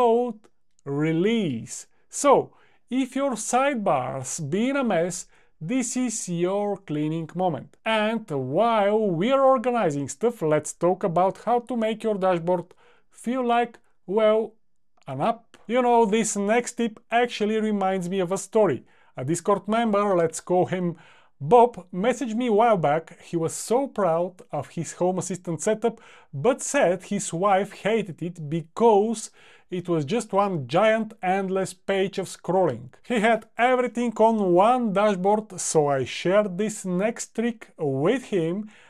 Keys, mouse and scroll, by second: 2.4 click, 3.0 click.